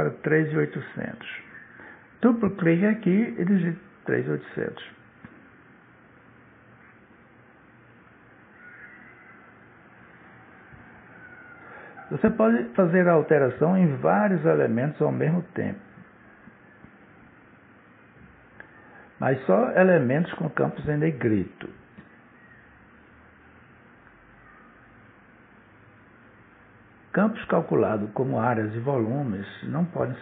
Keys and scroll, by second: 3.9 3, 5.9 Return, 20.9 2, 23.8 Return.